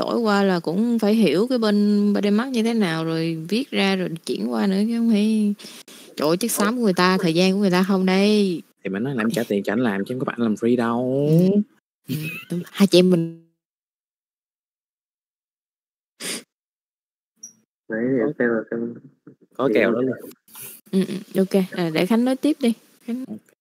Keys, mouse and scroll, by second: 11.3 middle click, 12.4 middle click, 13.1-16.4 drag, 16.4 alt+shift+a, 16.4 middle click, 16.9 middle click, 17.5 click, 18.5 click, 21.1 middle click, 23.4-23.6 middle drag.